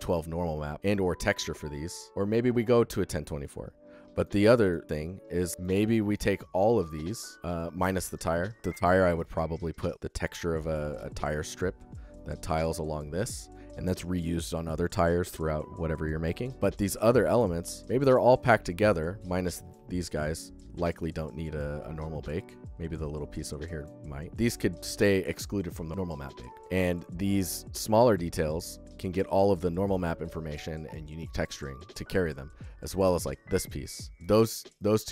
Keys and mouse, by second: 27.9-35.1 drag.